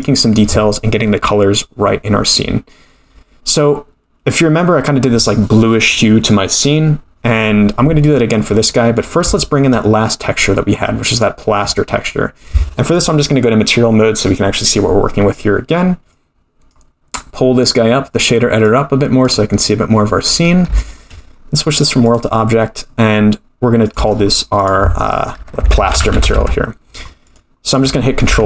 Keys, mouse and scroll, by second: 0.0 click, 8.0-8.5 scroll down 5, 8.5-8.8 middle drag, 9.0 scroll up 3, 9.3-9.7 shift+middle drag, 9.8-10.6 middle drag, 10.6-11.1 scroll up 1, 11.1 click, 13.1-14.2 drag, 16.1-16.7 drag, 18.7 click, 19.6-19.9 scroll up 2, 20.4 scroll down 1, 20.8 shift+middle click, 21.6 click, 23.9 click, 24.6-27.0 drag, 27.3 click, 27.7 click.